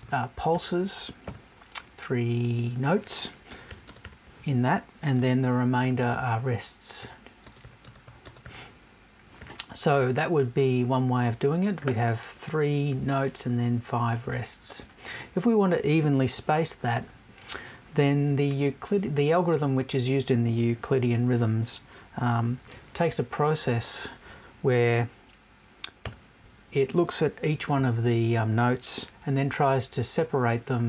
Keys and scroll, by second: 1.2 BackSpace.